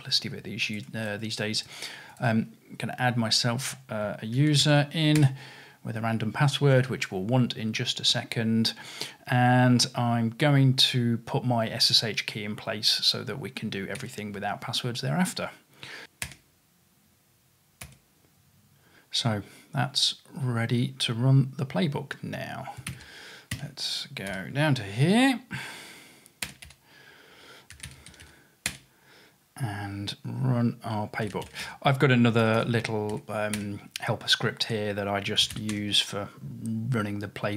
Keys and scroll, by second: 4.4 super+c, 4.7 super+v, 5.2 Return, 16.3 Return, 24.3 q, 26.5 Return, 26.7-28.7 typing, 31.0-33.4 typing, 33.6 Return, 35.2-36.0 typing.